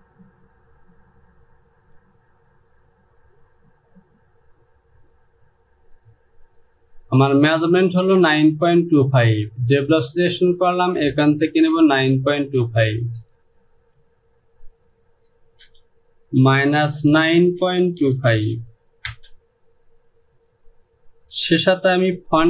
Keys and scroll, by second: 13.3 space, 15.5 Down, 16.5 KP_Subtract, 17.2 KP_9, 17.7 KP_Decimal, 18.1 KP_2, 18.4 KP_5, 19.2 Return.